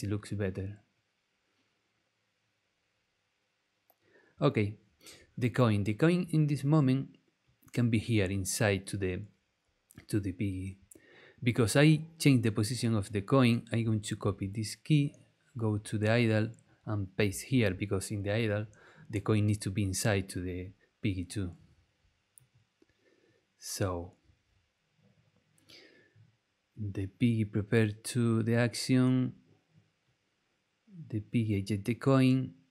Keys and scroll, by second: 14.2 super+c, 17.5 super+v.